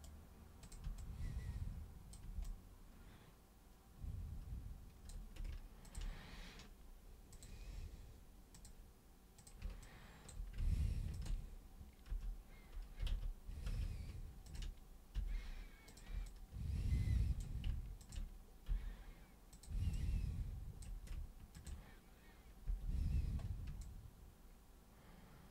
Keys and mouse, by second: 0.6 super+click, 0.9-2.1 alt+super+drag, 2.4-5.0 alt+super+drag, 5.8 ctrl+shift+super+click, 7.3 super+click, 8.5 super+click, 9.4 super+click, 9.8 alt+super+click, 11.1 ctrl+shift+super+click, 12.0 super+g, 13.7 ctrl+super+z, 14.4 ctrl+shift+super+click, 15.1 super+g, 15.8 super+click, 16.2-17.3 alt+super+drag, 18.0 ctrl+shift+super+click, 18.6 super+g, 19.5 super+click, 19.9-20.8 alt+super+drag, 21.6 ctrl+shift+super+click, 22.6 super+g, 23.8-25.5 alt+super+drag.